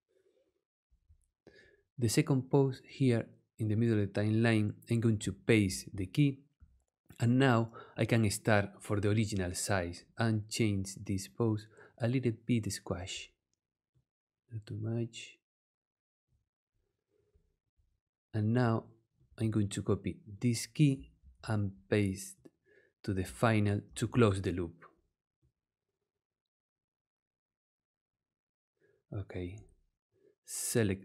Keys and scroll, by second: 5.6 super+v, 21.2 super+c, 23.9 super+v.